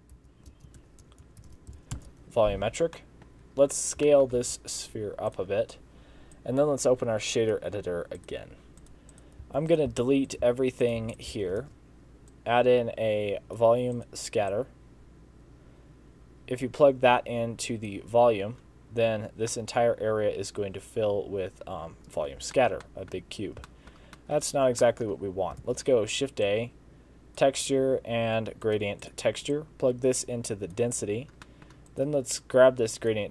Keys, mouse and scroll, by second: 3.0 middle click, 3.4-4.0 scroll down 7, 4.1 shift+middle click, 4.4 s, 6.4 click, 8.2 click, 8.9 click, 8.9 middle click, 8.9 scroll down 1, 9.2 click, 9.5-11.7 typing, 9.8 click, 10.3 click, 10.9 click, 11.2 click, 14.5 click, 19.0-19.5 scroll down 3, 19.5 middle click, 22.9 middle click, 23.4 scroll up 2, 23.7 shift+middle click, 24.2 middle click, 24.5 scroll up 3, 24.9 middle click, 25.3 scroll up 2, 25.7 shift+a, 29.6 click, 31.5 middle click, 31.9 click, 32.5 click.